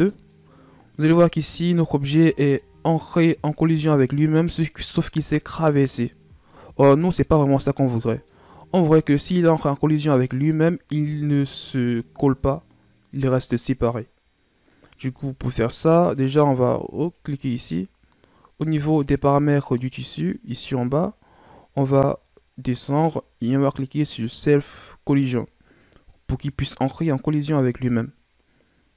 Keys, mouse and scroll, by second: 0.2-2.2 middle drag, 2.2 scroll down 1, 2.5 middle click, 3.3-3.8 scroll down 1, 3.8-6.7 middle drag, 6.7-7.1 scroll down 2, 7.1-8.6 middle drag, 8.6-9.1 scroll up 4, 9.2-12.2 middle drag, 17.0-17.9 drag, 17.9-18.2 scroll down 4, 20.4 click, 21.3 scroll down 2, 22.0-24.5 scroll down 25, 24.5-26.8 scroll down 16, 26.8 click.